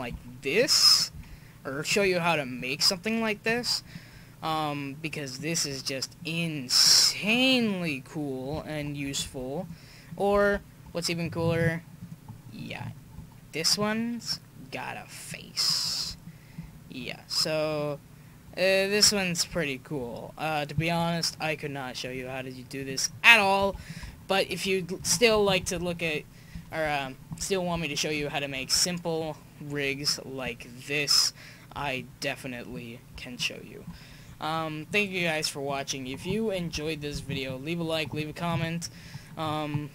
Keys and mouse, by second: 0.6-1.8 drag, 1.2 s, 4.2-5.0 middle drag, 5.2 middle click, 6.4 middle click, 6.7 middle click, 9.3 x, 10.5 shift+a, 13.7-14.0 drag, 15.8 click, 16.3-17.1 drag, 17.1 middle click, 17.5 middle click, 23.6 x, 25.5 KP_1, 26.3 click, 33.8 click, 36.6 KP_5.